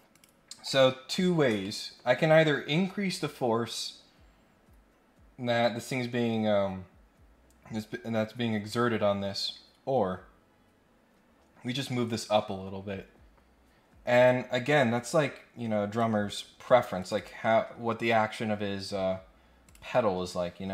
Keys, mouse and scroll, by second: 0.1 click, 0.9 scroll down 2, 1.2 scroll up 1, 1.6 middle click, 15.9 click, 17.0 click, 19.6 click, 20.6 scroll up 1.